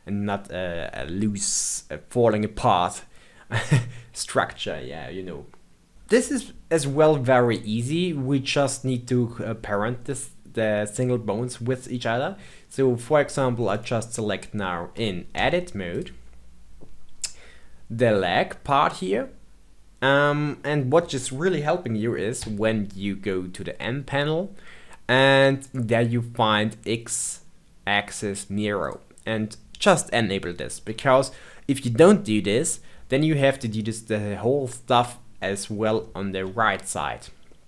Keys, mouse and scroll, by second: 6.4-8.7 shift+middle drag, 8.7-10.0 scroll up 2, 10.0-13.0 middle drag, 13.7 click, 15.3 Tab, 15.8 click, 22.3 n, 25.6 click, 28.8 click, 36.0-37.6 shift+middle drag.